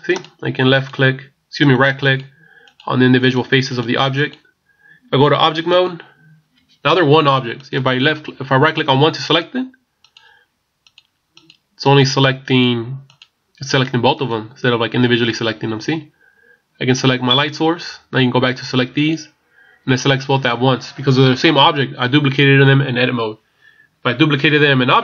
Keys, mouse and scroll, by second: 5.8 Tab, 7.6 right click, 9.3-17.1 right click, 17.4 right click, 19.1 right click.